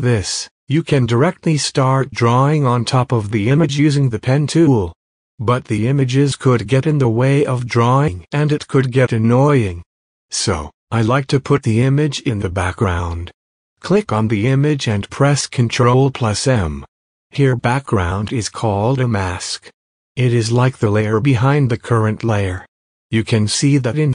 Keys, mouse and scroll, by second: 1.5 space, 1.7 click, 1.9 space, 4.2 click, 6.7 click, 14.0 m, 19.4 typing.